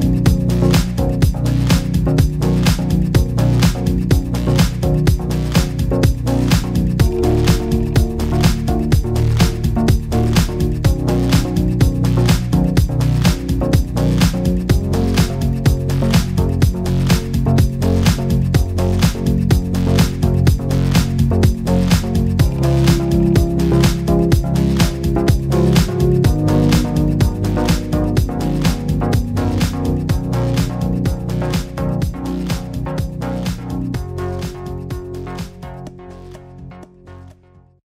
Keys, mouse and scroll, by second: 0.1 click, 0.3 click, 0.7 click, 1.7 m, 5.1 click, 5.3 click, 5.5 click, 5.8 click, 6.0 scroll down 2, 6.2 click, 6.3 click, 6.4 click, 6.6 click, 6.8 scroll down 2, 6.9 scroll up 2, 7.2 click, 7.5 middle click, 7.8 click, 7.8 click, 8.1 click, 8.3 click, 8.5 click, 8.6 click, 10.8 click, 10.8 scroll down 1, 10.9 middle click, 11.1 middle click, 11.4 middle click, 11.4 click, 11.5 Tab, 11.6 click, 11.7 click, 11.8 click, 12.1 click, 12.3 click, 12.8 click, 13.0 click, 13.1 click, 13.8 click, 14.3 f, 14.9 KP_0, 15.4 right click, 15.6 right click, 16.3 right click, 16.3 click, 23.1 scroll down 4, 23.4 click, 23.5 Tab, 23.7 click, 24.0 click, 24.2 click, 24.3 click, 24.9 click, 25.7 click, 26.1 click, 26.3 click, 26.4 middle click, 26.6 KP_0, 26.8 scroll up 1, 26.9 scroll down 1, 26.9 scroll down 1, 27.2 shift+middle click, 27.9 click, 28.0 click, 30.7 click.